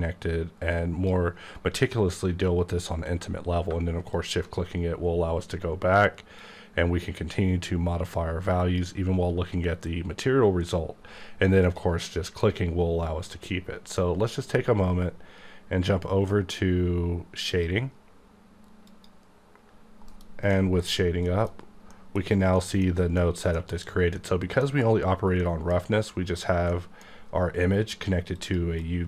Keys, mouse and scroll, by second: 3.6 shift+click, 6.3 click, 11.6 click, 17.5 click, 18.9 click, 19.7-20.1 scroll up 1, 20.3 KP_Decimal, 20.5 middle click, 20.9-21.3 scroll up 4, 21.3 middle click, 21.6-21.9 scroll down 1, 21.9 middle click, 22.1-22.5 scroll down 2, 22.5 middle click, 22.8 scroll down 1, 23.1 scroll up 1, 23.2 middle click, 23.5 scroll down 1, 23.7-24.1 scroll up 3, 24.1 middle click, 24.3 scroll down 1, 25.4 middle click, 26.3 click, 26.7 middle click, 28.3 click, 28.8 click.